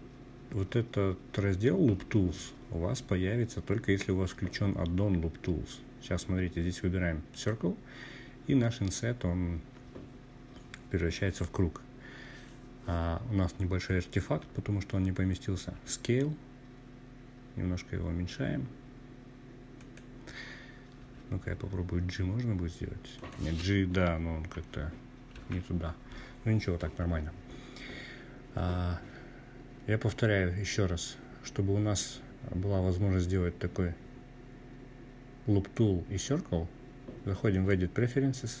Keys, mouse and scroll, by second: 13.7 s, 17.7-18.9 drag, 18.9 g, 21.1 click, 23.3 ctrl+z, 35.5-38.6 drag.